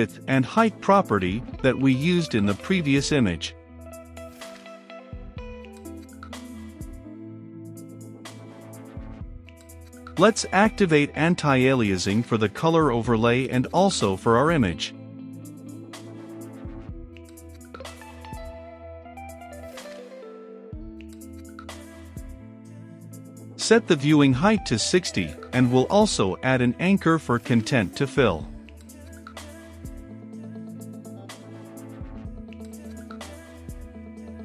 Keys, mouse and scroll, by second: 0.0-0.5 typing, 1.1 ctrl+space, 1.3 Return, 1.9 i, 2.0 c, 2.0 o, 2.1 n, 2.5 Down, 3.0 Return, 3.6-4.9 typing, 4.2 Return, 5.4 Down, 5.7 Return, 9.5 click, 10.2 t, 10.4 r, 10.5 u, 10.7 e, 12.0-13.7 drag, 13.7 Return, 14.0 a, 14.3 n, 14.4 t, 15.1 Return, 15.7 t, 16.0 r, 16.1 u, 16.2 e, 17.4 ctrl+s, 18.5-23.5 drag, 23.5-29.5 middle drag, 29.5 Return, 30.1 ctrl+z, 30.2 a, 30.4 n, 30.5 c, 30.6 h, 31.1 Return, 31.7 p, 31.9 a, 32.0 r, 32.9 Return, 33.8-34.4 typing.